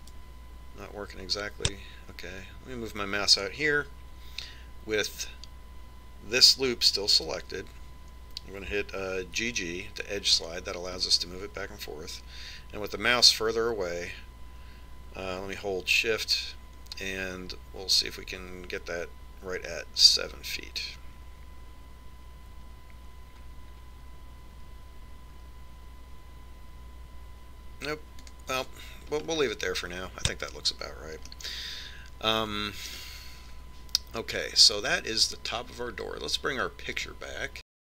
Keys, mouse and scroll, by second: 11.3 g, 31.2-33.2 scroll up 1, 33.2-35.1 middle drag.